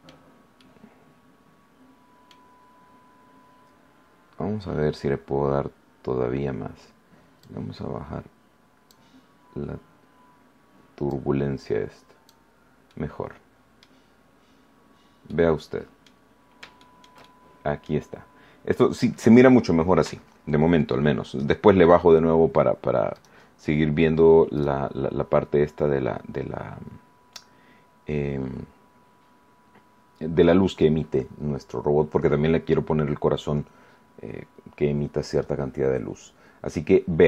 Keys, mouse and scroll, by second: 0.5-2.4 middle drag, 2.8 scroll up 1, 7.4-9.0 drag, 11.0-12.4 drag, 12.8-14.0 middle drag, 15.2 middle click, 16.8-18.0 shift+middle drag, 23.1 right click, 24.5 right click.